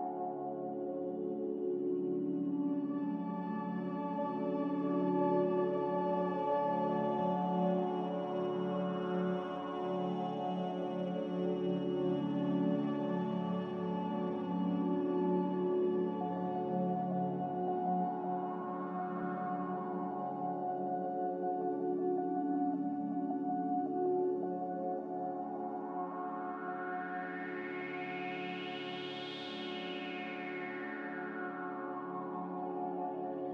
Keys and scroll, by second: 2.2 typing, 10.2 a, 11.4 ctrl+k, 17.1 s, 18.3-20.9 typing, 23.4 f, 26.8 n, 28.4 a, 31.8 ctrl+z.